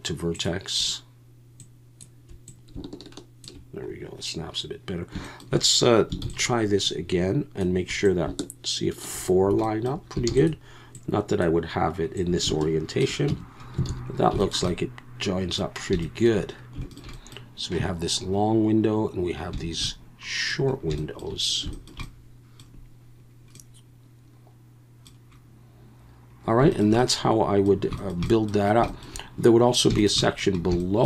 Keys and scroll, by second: 6.2 shift+d, 10.3 shift+d, 13.3 Tab, 13.9 alt+a.